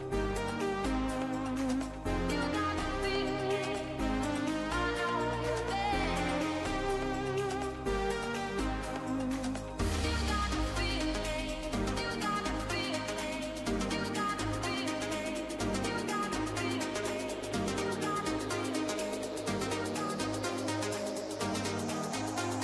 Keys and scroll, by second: 10.5 ctrl+-, 11.6 ctrl+=.